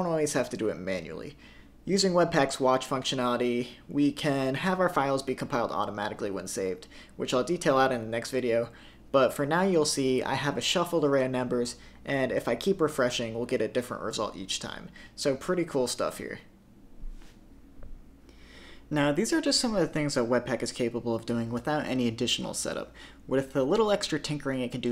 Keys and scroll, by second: 5.6 super+s, 7.3 super+s, 9.5 super+r, 12.7 super+r, 13.6 super+r, 14.5 super+r, 15.4 super+r.